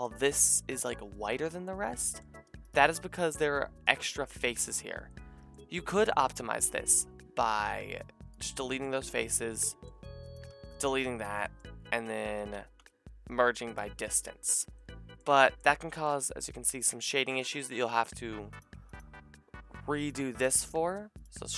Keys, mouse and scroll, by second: 1.6 click, 2.6 alt+shift+click, 2.9 g, 5.1-6.2 drag, 6.2 middle click, 7.6 x, 10.2 alt+shift+click, 10.5 x, 12.4 a, 12.8 m, 15.3 shift+middle click, 16.5 Tab, 17.1 Tab, 17.1 middle click, 17.7 a, 20.3-21.5 ctrl+drag.